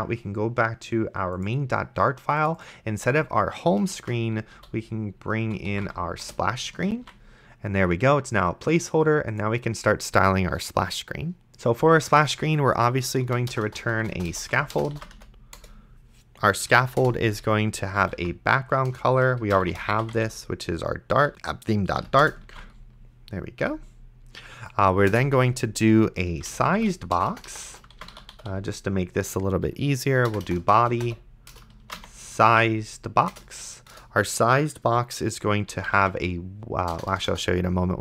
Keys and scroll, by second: 4.3-6.4 typing, 7.2 ctrl+s, 13.4 shift+s, 13.5 BackSpace, 14.5 shift+BackSpace, 14.7 s, 15.1 c, 15.6 Return, 16.7 Right, 17.0 Return, 17.8-20.7 typing, 18.9 Return, 21.3 Down, 21.3 Return, 22.0 End, 22.2 Return, 22.7 ctrl+s, 25.1 Return, 26.1-29.1 typing, 30.3-32.8 typing, 31.5 Return, 33.3 Return, 35.5-36.9 typing.